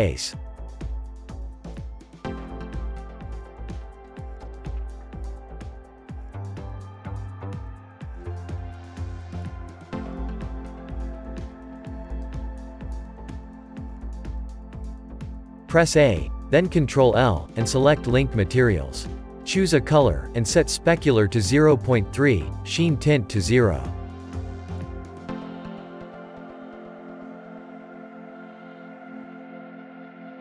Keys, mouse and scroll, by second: 0.7-2.4 drag, 8.9-14.0 drag, 14.0-14.5 middle drag, 14.5 a, 18.3 ctrl+l, 20.6 click.